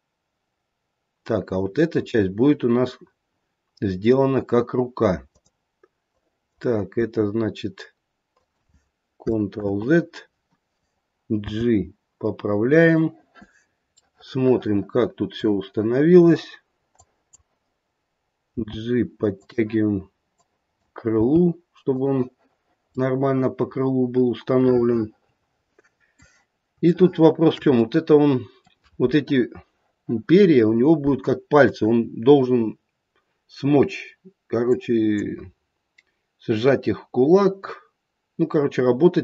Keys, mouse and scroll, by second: 6.0 click, 6.9 e, 9.5 ctrl+z, 11.4 g, 14.0 middle click, 14.8 middle click, 16.9 click, 18.5 g, 20.2 click, 21.0 g, 22.9 middle click, 24.5 middle click, 26.9 shift+middle click, 27.8 middle click, 34.6 click.